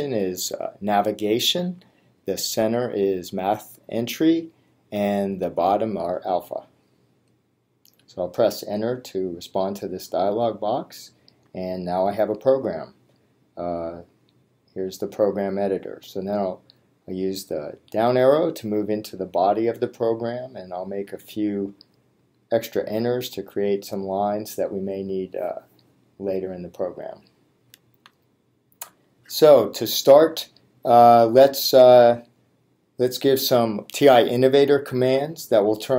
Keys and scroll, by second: 18.0 Down, 21.1 Return, 23.7 Up.